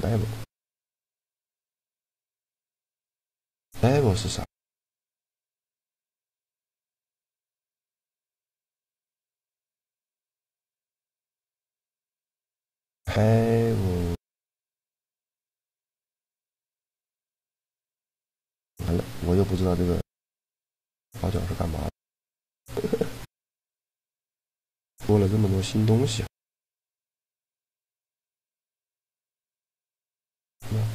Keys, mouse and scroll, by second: 6.7-10.1 middle drag, 10.6-12.4 middle drag, 12.4-14.2 right drag, 14.2 middle click, 14.5-16.5 drag, 16.5 middle click, 16.8 shift+g, 20.7 middle click, 20.9 click, 21.7 right click, 22.5 g, 27.9 ctrl+b.